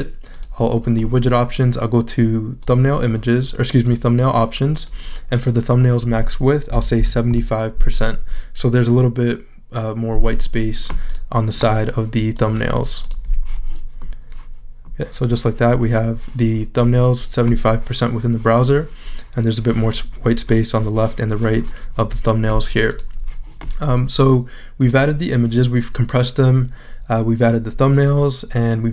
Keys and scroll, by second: 6.5-7.4 typing.